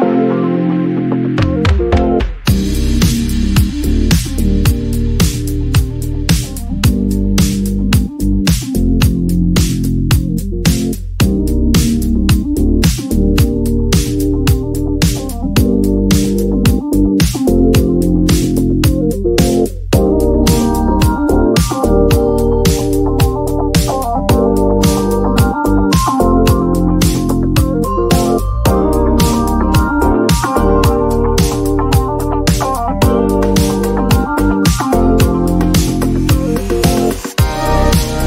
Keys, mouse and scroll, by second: 0.8 click, 2.2 click, 4.6 click, 5.6 click, 7.4 click, 10.3 click, 13.3 click, 15.0 click, 15.6 click, 17.4 click, 18.8 click, 20.1 click, 21.7 click, 23.2 click, 25.3 click, 27.5 click, 30.0 click, 30.9-32.0 scroll, 32.0-33.4 scroll, 35.0 click, 37.4 alt+click.